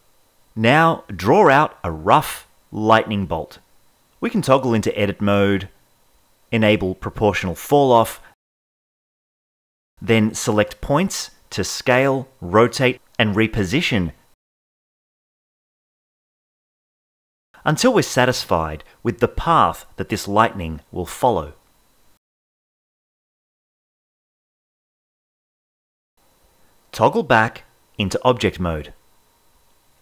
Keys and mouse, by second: 0.6-2.4 drag, 4.2 ctrl+Tab, 5.4 alt+s, 6.4 alt+s, 7.0 alt+s, 7.2 drag, 7.9 alt+s, 8.2 alt+s, 8.7 click, 8.8 g, 9.3 alt+s, 9.8 click, 9.8 alt+s, 10.4 alt+s, 10.9-12.6 typing, 11.9 alt+s, 13.0 alt+s, 13.4 alt+s, 13.9 click, 14.3 alt+s, 15.4 l, 15.7 drag, 16.4 click, 16.5 alt+s, 16.8 click, 16.8 alt+s, 17.2 alt+s, 18.0 alt+s, 18.5-21.7 typing, 18.7 click, 18.8 alt+s, 21.4 click, 22.4 alt+s, 23.0 alt+s, 23.6 alt+s, 24.6 g, 24.8 drag, 25.2 g, 25.9 g, 26.3 g, 27.8 ctrl+Tab.